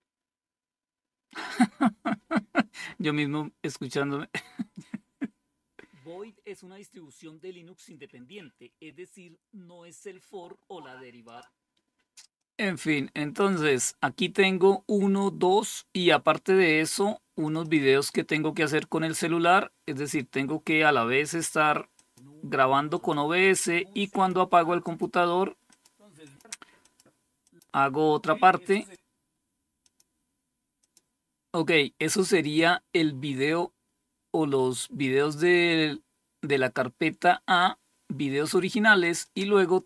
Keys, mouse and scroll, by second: 10.8 click, 11.9 click, 12.8 click, 16.9 click, 21.4 click, 21.7 click, 22.4 click, 23.6-25.3 drag, 25.7 click, 26.3 click, 26.9 click, 28.2 click, 29.3 click, 30.2 click, 31.9 click, 38.4 click, 39.5 click.